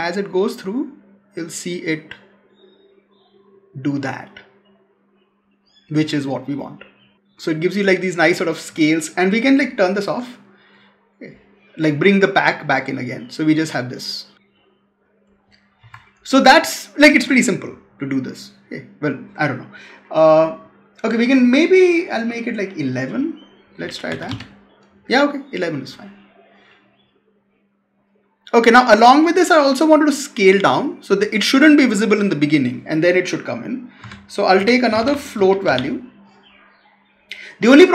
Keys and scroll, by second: 15.7 Escape, 23.7 Delete, 33.9 Tab.